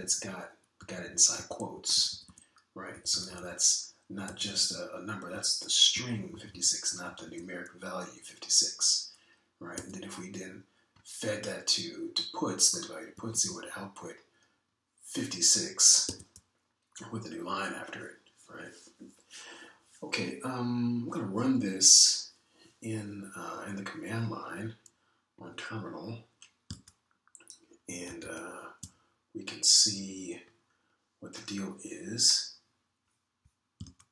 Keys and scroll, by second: 0.4 Left, 0.8 Right, 1.3 Right, 1.8 Left, 2.1 Left, 2.3 Left, 2.7 Right, 3.0 Right, 3.2 Right, 3.9 Left, 4.2 Left, 4.3 Left, 5.2 Right, 5.5 Right, 6.3 Right, 6.9 Left, 7.3 Left, 7.5 Left, 7.9 Right, 8.3 Right, 10.7 Down, 14.1 Down, 14.3 Down, 14.5 Down, 17.0 Down, 29.0 super+Tab, 29.2 super+Tab.